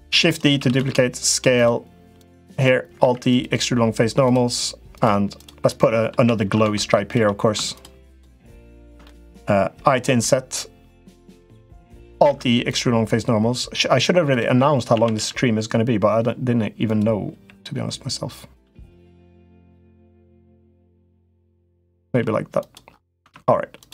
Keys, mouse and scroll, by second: 0.4 s, 1.9 click, 2.7 alt+e, 5.2 click, 5.5 middle click, 7.9 shift+click, 8.5 shift+click, 8.9 middle click, 11.7 i, 12.0 alt+e, 14.7 a, 14.9 g, 17.1 g, 18.4 g, 21.8 g, 23.0 Tab.